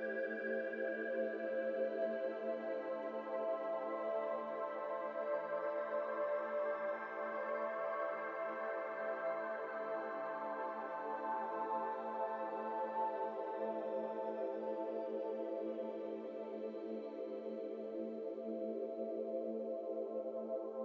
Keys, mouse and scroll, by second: 0.9 shift+click, 1.2-2.2 middle drag, 2.2 shift+click, 2.5-4.0 shift+middle drag, 4.0 shift+click, 4.2-6.2 middle drag, 6.2-6.7 scroll up 1, 6.7-7.9 middle drag, 7.9 KP_1, 8.6-9.1 scroll up 2, 8.8 shift+middle click, 9.1 alt+e, 10.9-11.9 middle drag, 11.9-15.0 drag, 16.4 middle click, 17.3 KP_1, 17.7 alt+z, 18.5 c, 19.3 2.